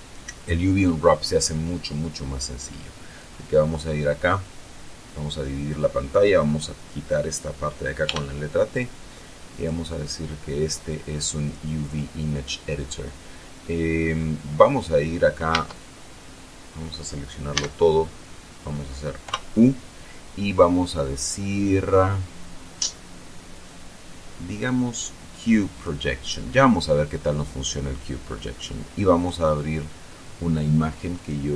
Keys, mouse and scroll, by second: 3.7-6.1 drag, 8.6 t, 10.1 click, 12.0 click, 14.1 middle click, 16.0 Tab, 18.0 a, 19.8 u, 26.3 click, 28.8 middle click, 29.7 click.